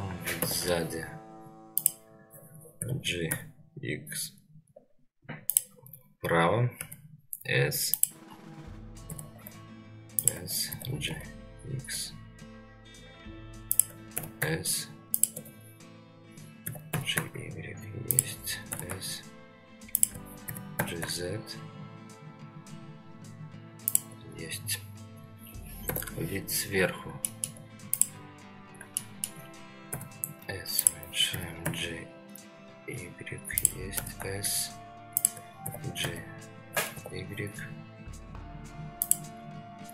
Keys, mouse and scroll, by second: 0.4 ctrl+KP_1, 1.4 scroll down 2, 1.8 click, 2.8 g, 6.8 s, 8.3-8.7 scroll up 2, 9.1 s, 10.7 g, 14.1 s, 16.6 g, 18.7 s, 20.4 g, 24.7-25.9 scroll down 1, 25.9 KP_7, 26.8 scroll down 2, 27.3 shift+middle drag, 27.9 click, 28.6 scroll up 2, 29.0-29.3 shift+middle drag, 29.9 s, 31.3 g, 33.9 s, 35.6 g, 39.5 scroll up 1.